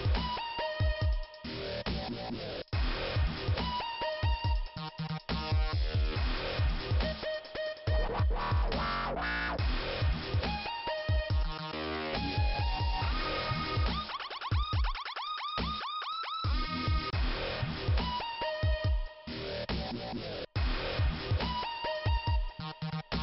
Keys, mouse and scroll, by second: 0.2 click, 1.0 click, 2.7 click, 2.8 click, 4.7 click, 4.9 click, 8.6 click, 10.1 click, 10.2 click, 12.4-13.3 scroll up 1, 13.3 click, 13.4 click, 13.5 click, 13.6 click, 14.5 click, 14.8 click, 17.3 click, 17.3 click, 18.8 click.